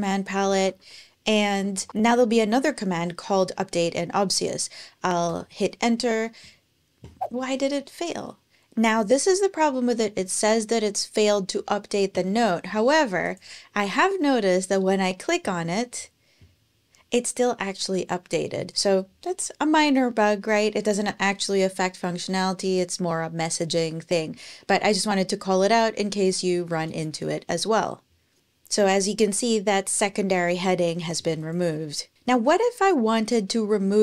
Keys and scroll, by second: 0.0-2.1 typing, 5.0 Return, 12.5 super+Tab.